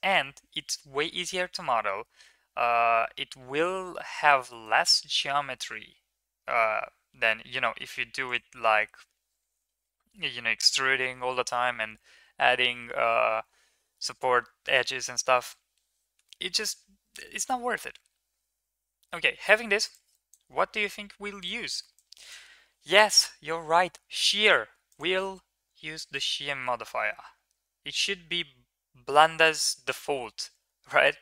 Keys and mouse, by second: 0.7 s, 5.1 g, 16.0 Tab, 16.6 1, 19.9 click, 21.2 click, 21.9 drag, 23.1 F3.